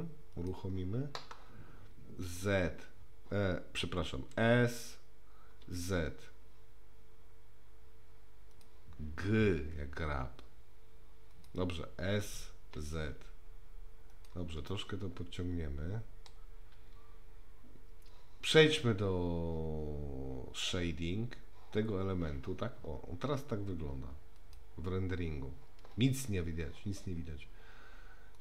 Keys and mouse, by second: 0.4 click, 2.4 z, 4.3 s, 9.6 g, 12.1 s, 14.7-16.3 middle drag, 24.4 click.